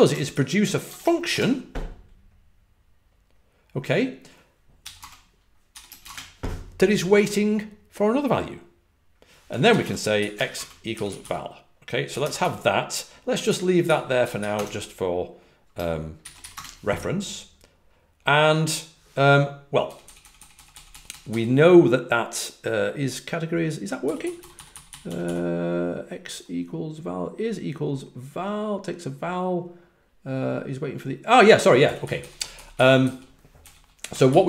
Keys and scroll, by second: 10.3-14.8 typing, 16.5 typing, 19.6-20.7 typing, 24.0-24.8 typing, 31.8-32.7 typing, 34.0-34.4 typing.